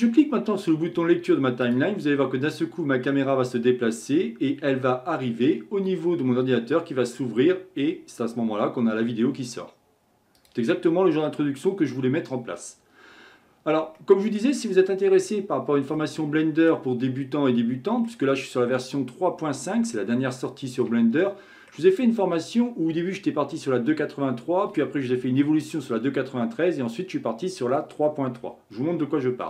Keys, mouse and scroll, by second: 1.6-4.7 drag, 10.3-13.5 drag, 13.9-14.8 middle drag, 14.8-15.5 scroll down 10, 15.9-17.0 middle drag, 17.0-17.5 scroll down 3, 17.5-24.4 middle drag.